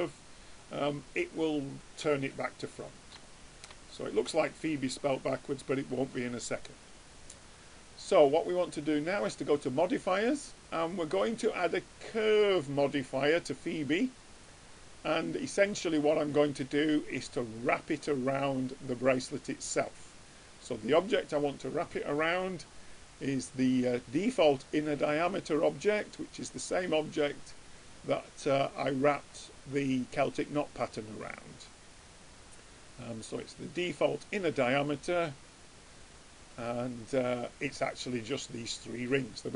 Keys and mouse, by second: 0.4-3.2 middle drag, 3.5-7.1 middle drag, 8.7-12.5 drag, 19.7-21.4 drag, 36.7-38.4 middle drag, 39.2 middle click.